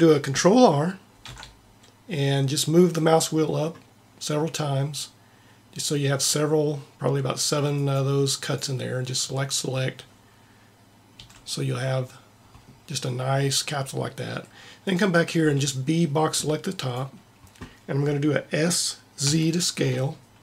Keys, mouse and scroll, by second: 1.3 ctrl+r, 11.3 a, 14.8-16.6 drag, 15.4 b, 19.2 s.